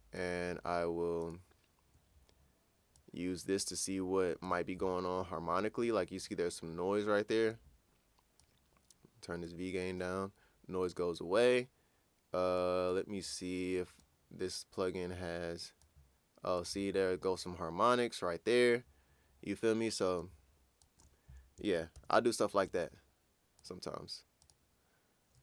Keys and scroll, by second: 21.9 ctrl+super+w.